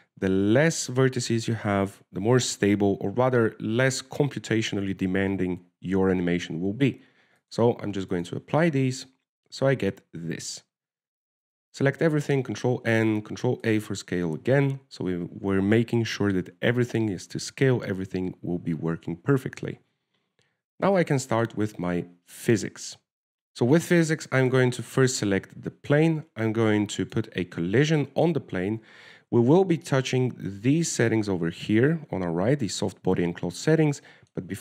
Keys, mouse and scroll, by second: 8.7 click, 9.4 click, 10.1 Tab, 13.1 ctrl+n, 13.7 Tab, 14.5 ctrl+a, 22.4 shift+middle click, 23.0-23.4 scroll down 2, 23.4 click, 25.8 right click, 26.1 right click, 26.4 shift+middle click, 28.3 click.